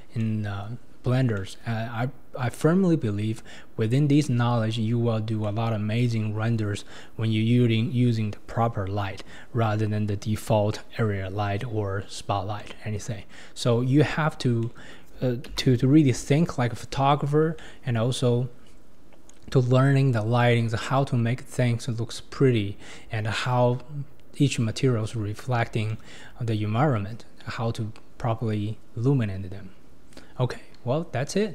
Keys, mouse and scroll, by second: 0.2-0.6 middle drag, 0.6-1.4 scroll down 5, 1.4-5.9 shift+middle drag, 5.9-9.0 scroll up 4, 9.0 scroll up 1, 9.2-10.2 scroll down 2, 10.2-12.6 scroll down 2, 12.6-14.0 middle drag, 14.0-14.6 scroll up 1, 14.6 middle click, 15.6 KP_0, 16.4-17.6 scroll up 10, 17.6-18.9 shift+middle drag, 18.9-21.9 scroll down 2, 22.5-23.9 scroll up 2, 23.9-25.4 scroll up 1, 25.4-25.9 scroll down 1, 25.9-28.9 shift+middle drag.